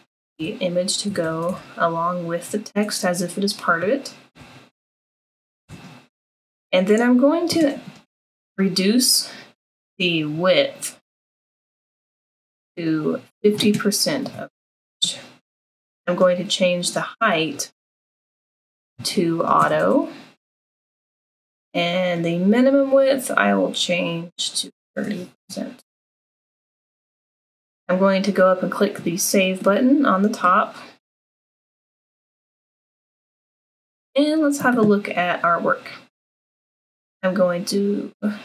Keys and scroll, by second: 0.0-2.1 typing, 4.1-5.7 typing, 14.2 5, 14.9 0, 18.0-20.4 typing, 24.4-25.1 typing.